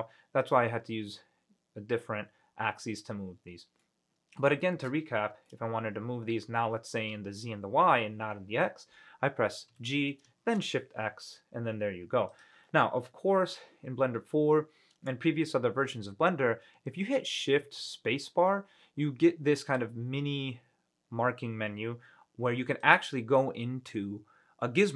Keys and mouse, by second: 4.0-4.6 middle drag, 4.8 shift+middle drag, 5.6-7.1 middle drag, 9.9 g, 10.6 shift+x, 12.5 click, 17.8 shift+space.